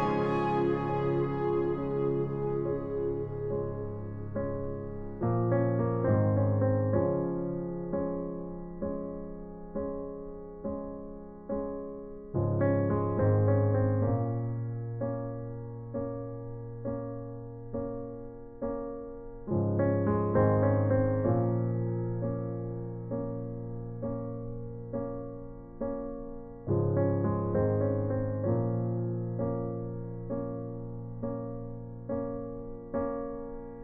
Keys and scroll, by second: 9.0 Escape, 9.2 ctrl+t, 12.8 Escape, 15.9 ctrl+alt+shift+t, 22.0 shift+Return, 32.4 b, 33.2 ].